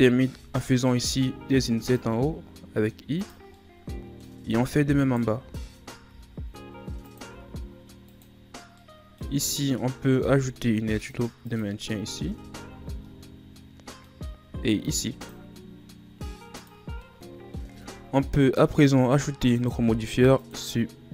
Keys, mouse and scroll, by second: 1.1 i, 2.1 i, 3.5 scroll up 1, 3.5-5.0 middle drag, 5.0 alt+right click, 6.0 i, 7.2 i, 8.7-10.3 middle drag, 10.3 ctrl+r, 11.9-12.4 scroll down 3, 12.8 scroll down 1, 13.0-14.8 middle drag, 14.8 ctrl+r, 17.0 middle click, 17.6 Tab, 19.5 click.